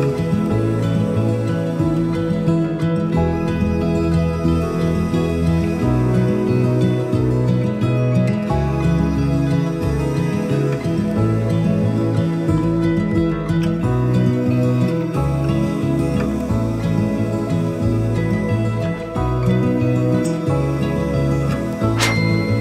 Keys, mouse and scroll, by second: 15.7-18.6 drag, 21.8 click.